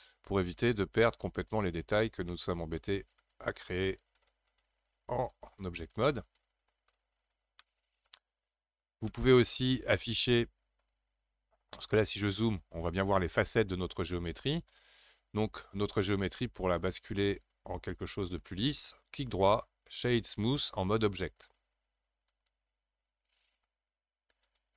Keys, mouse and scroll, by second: 2.3 middle click, 3.2-7.6 drag, 7.6-8.6 middle drag, 8.6 click, 9.1-12.0 middle drag, 12.0-15.0 scroll up 6, 15.0-17.7 drag, 17.7-18.8 scroll down 1, 18.8-24.4 right drag, 24.4-24.7 drag.